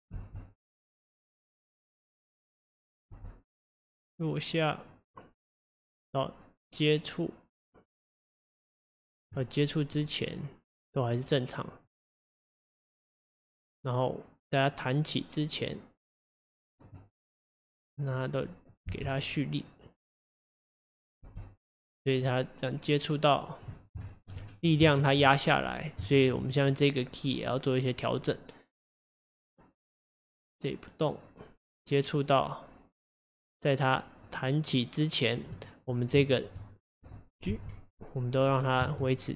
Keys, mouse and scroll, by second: 0.2 space, 3.1 space, 3.6-7.1 drag, 9.9 click, 11.9-15.0 drag, 17.6 click, 18.5-18.9 drag, 18.9 space, 21.3 space, 22.2-24.1 drag, 24.1 shift+middle drag, 24.4-24.9 shift+scroll up 3, 24.9 shift+middle click, 25.6-26.1 scroll up 2, 26.1-26.8 drag, 26.1-26.8 shift+middle drag, 29.0-32.1 drag, 35.9-36.3 scroll up 2, 36.3 shift+middle drag, 36.5-37.2 shift+scroll up 2, 37.6 g.